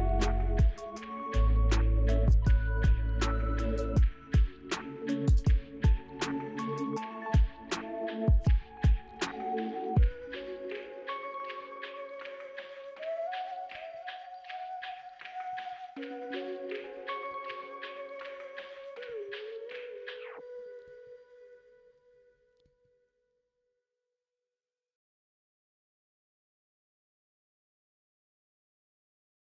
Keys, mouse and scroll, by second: 12.4-12.8 scroll up 1, 13.3-17.7 scroll down 1, 23.0-24.7 scroll up 2, 24.8 scroll down 2, 28.4 right click.